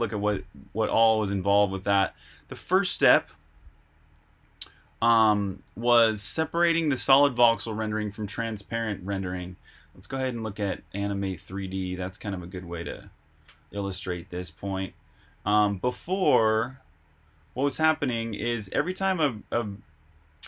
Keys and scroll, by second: 9.3 super+Tab, 11.2-14.8 typing, 11.3 Return, 13.8 Escape, 17.1-18.1 typing, 17.4 Escape, 19.5-20.4 typing.